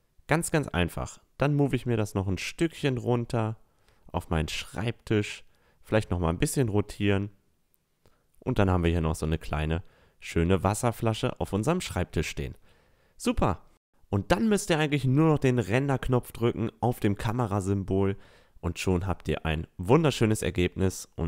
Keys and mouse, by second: 0.4-0.8 middle drag, 0.4-0.8 right drag, 1.4-1.9 middle drag, 1.4-1.9 right drag, 1.7 Tab, 2.4 Tab, 3.5-5.4 drag, 5.7 r, 8.4-8.9 middle drag, 9.0 middle click, 9.8-10.3 drag, 10.3-12.6 middle drag, 11.2 a, 12.6 click, 14.7-18.0 middle drag, 19.3 middle click, 20.1-21.2 drag.